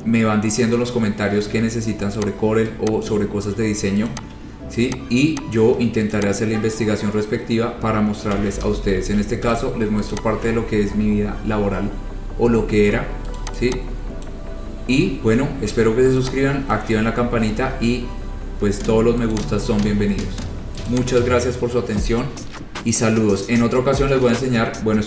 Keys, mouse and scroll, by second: 0.0 scroll down 1, 0.1 scroll, 1.1 scroll, 1.8 scroll, 2.4 click, 3.3 click, 4.4 shift+click, 4.4 shift+click, 5.2 click, 5.8 click, 6.4 shift+click, 8.6 c, 9.2 ctrl+z, 9.7 e, 10.4 click, 10.6-11.0 scroll down 3, 11.0 scroll up 3, 11.6-12.2 scroll, 12.2-12.6 scroll, 13.6 click, 14.5 click, 14.8-15.6 scroll, 16.4 click, 18.8-19.2 scroll, 19.6 click, 20.0-20.6 scroll, 21.1 click.